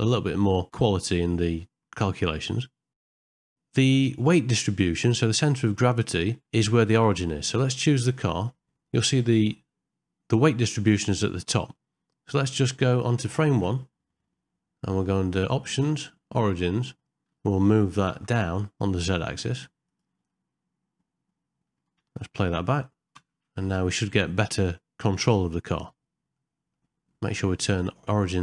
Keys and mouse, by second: 2.9 shift+Left, 3.0 middle click, 3.1 middle click, 3.3 ctrl+middle click, 3.4 shift+middle click, 3.5 middle click, 5.4-6.4 middle drag, 7.9 click, 9.1 middle click, 11.8 middle click, 13.5 shift+Left, 15.3 click, 15.9-17.0 drag, 20.4-21.7 middle drag, 22.1 space, 23.7 shift+Left, 26.4 middle click, 27.8-28.4 drag.